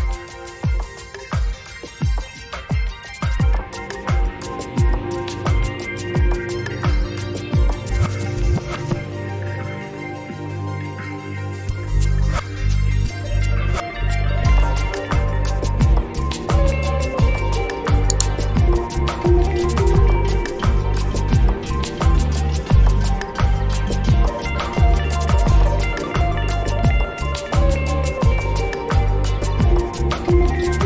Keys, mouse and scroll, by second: 2.4-10.4 drag, 11.2-13.7 drag, 14.8 ctrl+click, 15.5 space, 15.7 click, 15.9 space, 17.1-24.2 drag, 28.1 click.